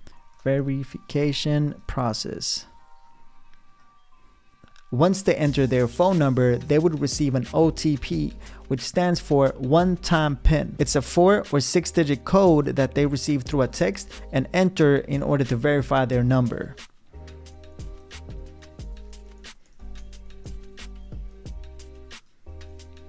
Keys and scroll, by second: 0.0-2.4 typing, 18.0-21.0 typing, 22.7 Return.